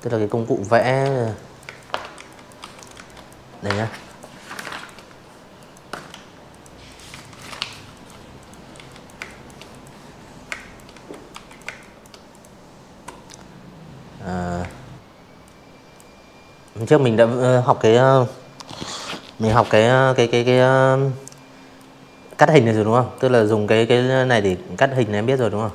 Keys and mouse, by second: 0.0-1.6 typing, 0.0 click, 1.1 click, 1.8 click, 2.6 right click, 3.4 click, 3.8 click, 4.1 z, 4.1 click, 4.4 v, 4.6 click, 4.9 click, 5.4 click, 5.7 z, 5.8 click, 6.1 space, 6.2 click, 6.7 click, 7.4 space, 7.5 click, 7.9 z, 8.1 click, 8.3 v, 8.5 click, 8.6 space, 8.8 click, 9.3 click, 11.6 space, 11.7-13.0 drag, 13.5 click, 14.6 space, 14.7 click, 18.8-20.1 drag, 20.1 v, 20.3 click, 20.7-21.4 drag, 21.9 click, 22.6 click, 23.2 drag, 24.7 click.